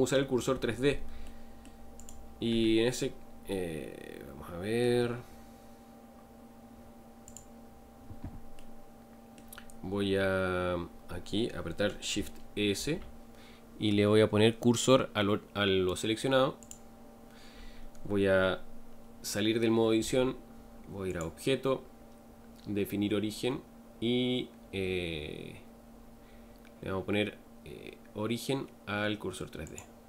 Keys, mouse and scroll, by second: 1.2 middle click, 2.1 click, 3.5-7.3 middle drag, 7.3 click, 8.5-30.0 middle drag.